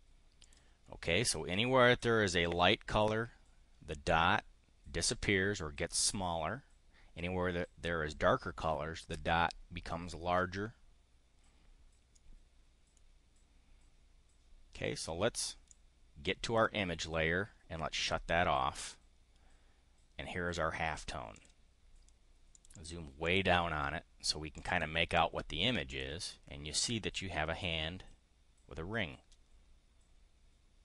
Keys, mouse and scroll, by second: 0.4 click, 11.7 click, 15.6-16.6 drag, 18.0 click, 21.3 click, 22.5 click, 23.2 click, 24.5 click, 25.9 click, 26.2-26.7 scroll up 1.